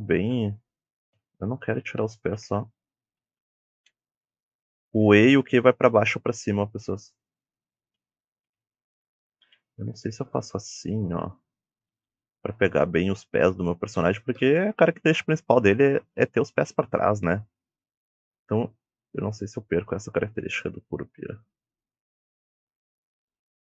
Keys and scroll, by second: 0.0 a, 1.3 s, 2.1 d, 3.7 e, 5.0 q, 5.4 e, 6.0 q, 6.8 e, 7.9 d, 8.5 e, 9.5 d, 10.9 w, 11.4 d, 12.0 w, 15.1-17.5 typing, 20.6 d, 23.4-23.7 typing.